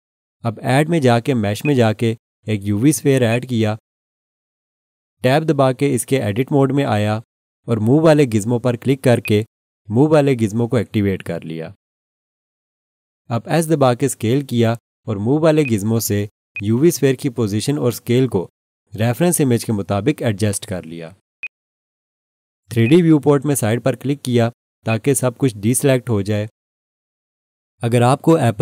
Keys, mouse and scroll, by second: 1.6 click, 6.1 Tab, 9.2 click, 14.7 s, 15.6 click, 18.8 scroll up 1, 19.9 s, 21.4 click.